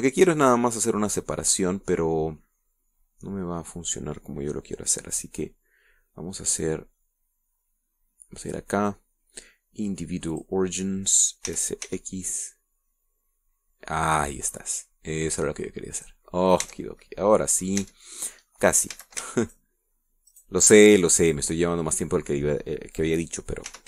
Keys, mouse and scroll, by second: 0.9-3.0 middle drag, 9.9 click, 11.7 click, 12.8 s, 13.3 x, 17.4 click, 17.6-18.0 scroll down 2, 18.0 Tab, 18.4-19.2 middle drag, 19.2 Tab, 20.3 a, 20.8 alt+shift+right click, 21.7 alt+shift+right click, 22.4-23.4 alt+shift+middle drag.